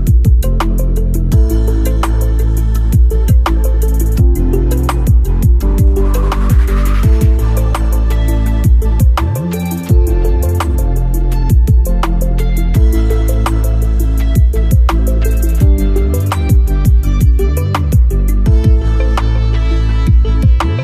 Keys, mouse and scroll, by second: 0.8-4.3 drag, 5.0 alt+scroll down 1, 5.5 alt+scroll up 1, 8.2-8.7 alt+scroll up 1, 9.3 alt+scroll up 1, 16.6 click, 18.7 click, 18.8 alt+scroll up 1, 19.4-20.2 alt+scroll up 1.